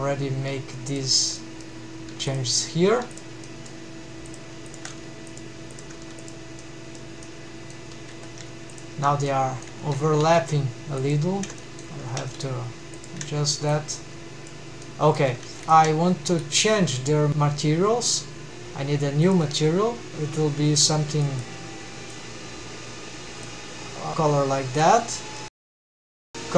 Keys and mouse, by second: 0.4 g, 1.3 middle click, 2.2 g, 3.0 g, 3.4 middle drag, 4.7 shift+click, 5.2 g, 5.8 click, 6.3 g, 6.6-7.0 middle drag, 7.3-7.7 middle drag, 8.1 2, 9.3-9.7 middle drag, 9.9 alt+a, 10.3 alt+z, 11.6 middle drag, 12.1 g, 13.0 shift+drag, 14.8-15.2 middle drag, 15.4 alt+a, 15.6 alt+z, 15.6 1, 15.6 3, 16.6-17.4 middle drag, 21.3 click.